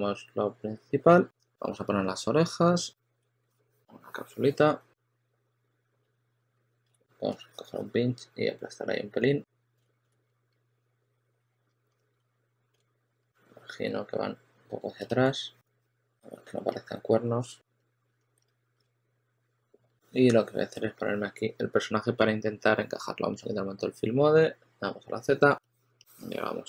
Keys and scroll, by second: 5.5-6.8 typing, 8.9 s, 9.7 super+z, 10.1 2, 11.8 s, 12.6 super+z, 12.9 e, 14.5 q, 15.7 w, 16.1 w, 17.7-19.6 typing, 24.5 z.